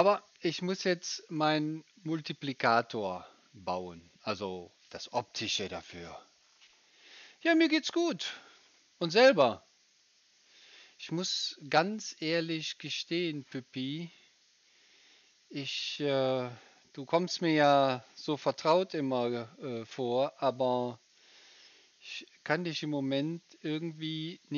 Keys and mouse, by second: 0.0-9.1 drag, 0.0-9.1 right drag, 9.1-24.5 middle drag.